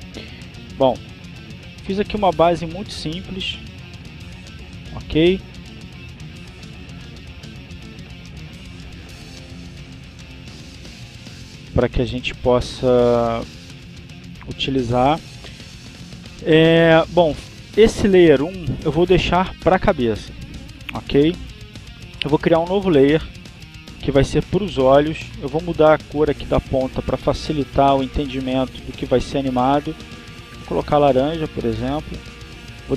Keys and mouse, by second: 0.7-5.6 drag, 8.2 click, 8.8-10.3 drag, 23.3 click, 25.0 click, 26.4 click, 28.9-30.9 drag, 31.1 click, 32.1 click.